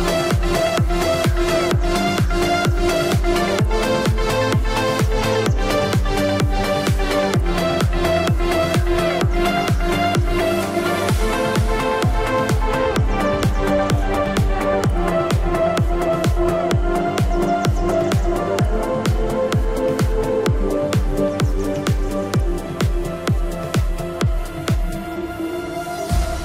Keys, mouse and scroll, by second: 2.3 ctrl+q, 3.7 click, 18.6 shift+click, 20.7 click, 21.4 c, 21.9 click.